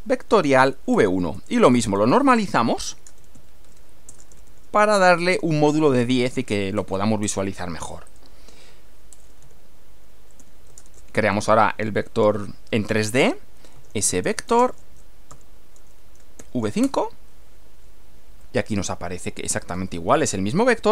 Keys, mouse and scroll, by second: 0.0-6.0 typing, 6.8 Return, 8.1 click, 9.1-10.9 typing, 13.2-16.4 typing, 16.8 Return, 18.4-19.9 middle drag.